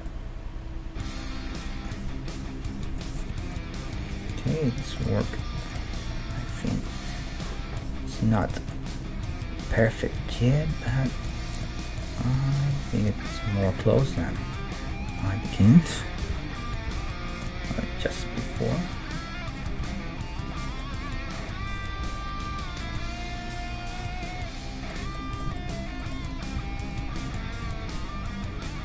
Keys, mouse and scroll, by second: 3.2-7.2 middle drag, 4.0 KP_1, 9.3 Tab, 9.7-11.3 right drag, 10.2 g, 12.3 Tab, 12.7 Tab, 13.3 click, 13.3 right click, 14.8 g, 15.7 right click, 16.2 o, 16.8 g, 19.5-20.6 right drag, 19.8 g, 20.6 middle click, 20.9 Tab, 25.1 Tab, 25.2-26.3 middle drag, 26.3-28.8 right drag, 26.6 g, 27.8 g.